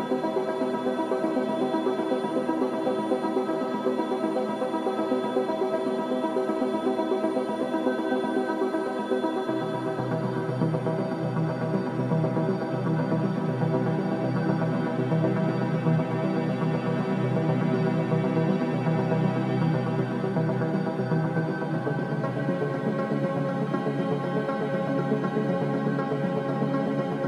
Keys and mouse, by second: 3.4 2, 4.1 1, 4.7 click, 6.7 click, 7.3 g, 11.5 g, 13.5 alt+z, 14.1 click, 14.3 g, 19.6 click, 20.0 g, 26.1-27.2 drag.